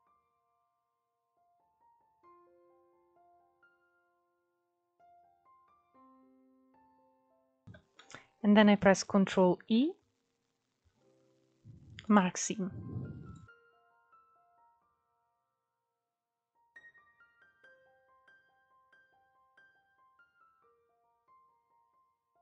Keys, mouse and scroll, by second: 0.3 scroll down 1, 0.4 shift+middle click, 0.8 scroll up 2, 1.1-2.1 middle drag, 2.1 alt+shift+click, 2.7 alt+shift+click, 3.2 alt+shift+click, 4.2 alt+shift+click, 4.7-6.2 middle drag, 6.2 alt+shift+click, 6.8-8.9 shift+middle drag, 8.9 ctrl+e, 12.2 scroll down 2, 12.6 click, 13.1 middle click, 13.8 scroll up 2, 14.0-15.1 middle drag, 15.1-15.6 scroll down 1, 15.6 middle click, 16.4-17.2 scroll up 2, 17.2 click, 17.8 alt+shift+click, 18.1 scroll down 2, 18.3-19.5 middle drag, 19.5 ctrl+e, 20.0 click, 20.2-21.6 middle drag, 21.6 scroll up 2, 21.8-22.4 shift+middle drag.